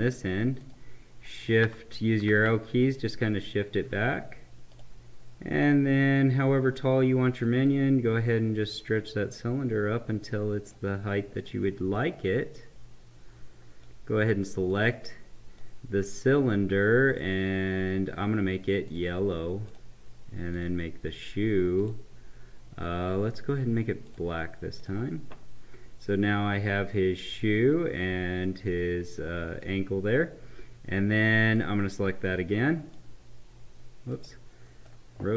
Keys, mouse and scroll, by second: 0.6 click, 2.0 Right, 4.7-11.4 drag, 12.0-14.7 right drag, 14.7-17.1 drag, 26.0-31.5 right drag, 31.6-34.1 drag, 34.1 right click.